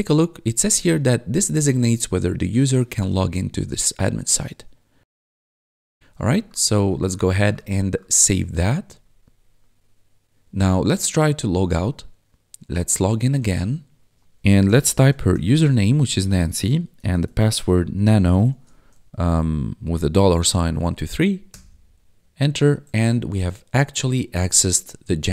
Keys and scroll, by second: 0.2 1, 3.5-4.7 typing, 6.0 1, 14.4-18.5 typing, 20.3-21.2 typing, 21.5 Return.